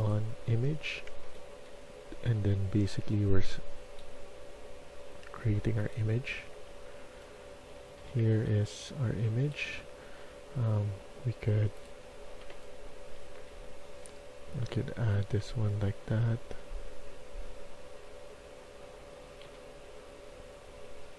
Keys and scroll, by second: 1.2 a, 2.2 d, 6.8-9.1 typing, 12.4-17.4 typing, 19.4 d.